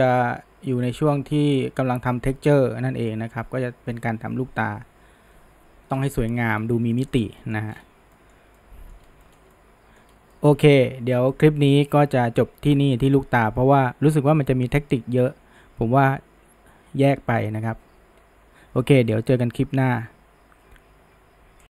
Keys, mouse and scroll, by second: 3.0-6.1 scroll down 1, 6.1-7.0 scroll down 1, 7.0-7.7 shift+middle drag, 7.7-8.2 scroll up 1, 8.2-9.1 shift+middle drag, 9.1 scroll down 1, 9.2-10.1 shift+middle drag, 10.1 scroll up 1, 10.4-13.4 shift+middle drag.